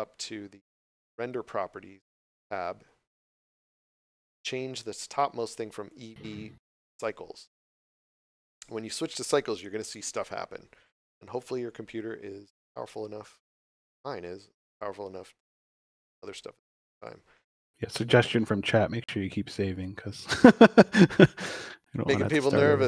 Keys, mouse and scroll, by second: 0.9 click, 5.9 click, 16.9 click.